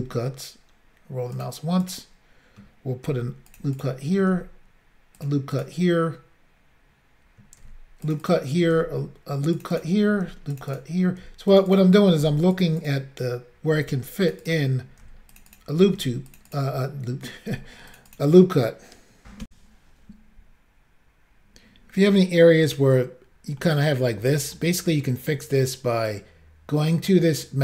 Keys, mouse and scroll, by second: 0.0 ctrl+r, 0.8 scroll up 1, 1.4 click, 1.5 click, 1.9 click, 1.9 double click, 3.1 ctrl+r, 3.5 click, 3.6 click, 3.8 click, 3.9 double click, 4.4 ctrl+r, 5.2 double click, 5.3 double click, 5.6 click, 5.7 double click, 7.7 ctrl+r, 8.1 click, 8.2 click, 8.3 click, 8.3 double click, 8.8 ctrl+r, 9.6 double click, 9.7 double click, 9.8 click, 9.8 double click, 10.3 ctrl+r, 10.6 double click, 10.6 double click, 10.7 double click, 10.8 double click, 11.3 ctrl+r, 11.5 double click, 11.6 double click, 11.7 double click, 11.8 double click, 12.3 ctrl+r, 12.6 double click, 12.7 double click, 12.8 double click, 12.9 double click, 13.9 ctrl+r, 14.3 double click, 14.3 double click, 14.5 click, 14.9 double click, 15.1 ctrl+r, 15.4 double click, 15.4 double click, 15.5 double click, 15.6 double click, 16.0 ctrl+r, 16.3 double click, 16.4 double click, 16.5 double click, 16.6 double click, 17.6 ctrl+r, 17.9 double click, 18.0 double click, 18.1 click, 18.2 double click, 19.5 Insert, 23.6 middle click, 24.6 middle click, 26.9 middle click.